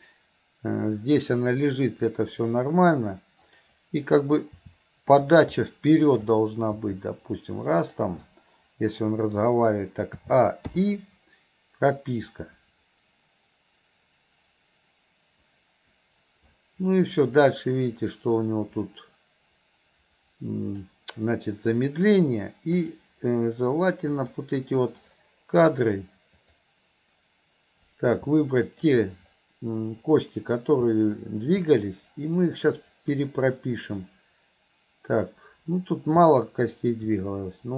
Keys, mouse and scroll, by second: 3.5 click, 12.0-20.9 drag, 22.8 click, 24.2 click, 26.5 click, 28.7 click, 36.7 click.